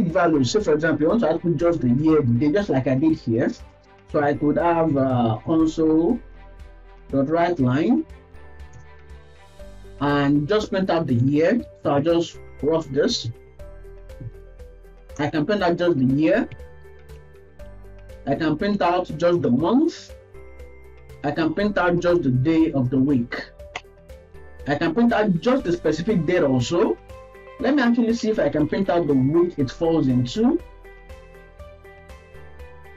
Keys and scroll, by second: 8.4 Down, 8.7 Return, 15.2 Return, 17.1 ctrl+c, 17.4 ctrl+v, 17.9 Up, 18.2 Left, 18.3 Left, 20.2 Return, 20.7 Down, 21.0 Left, 21.5 ctrl+shift+Left, 23.8 Return, 24.2 ctrl+s, 24.4 Right, 24.7 Right, 32.0 Left, 32.3 Left.